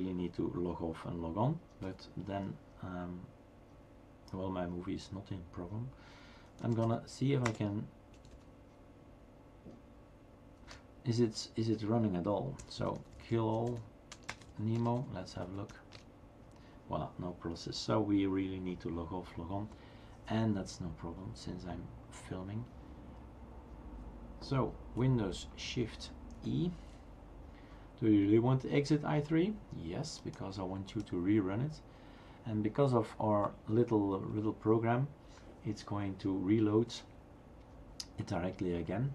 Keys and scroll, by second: 1.8 typing, 6.2-8.3 typing, 10.7-15.8 typing, 15.9 Return, 26.4 shift+super+e.